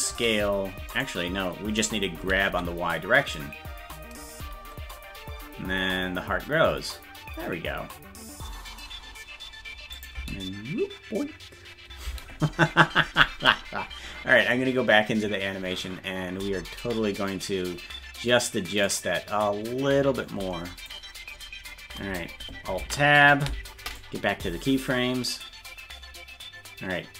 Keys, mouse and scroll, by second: 21.5 click, 22.8 ctrl+Tab, 24.0-27.1 drag.